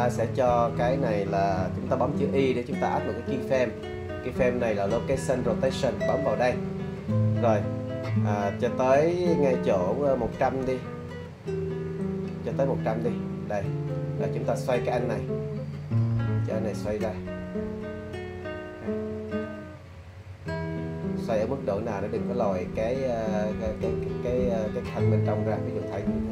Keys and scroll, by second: 3.5 i.